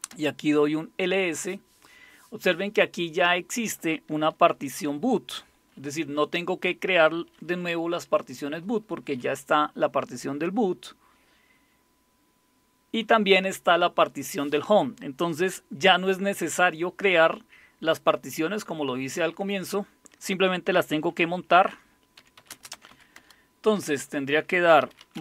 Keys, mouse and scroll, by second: 0.0-0.4 typing, 21.9-23.4 typing, 24.6-25.2 typing.